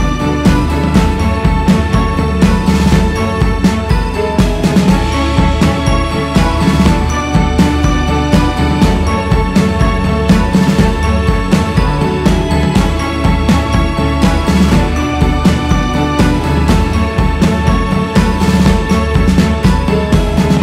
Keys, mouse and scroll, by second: 7.4 shift+s, 7.8 f, 9.4-17.3 drag, 17.3 scroll down 1, 17.9-20.6 drag.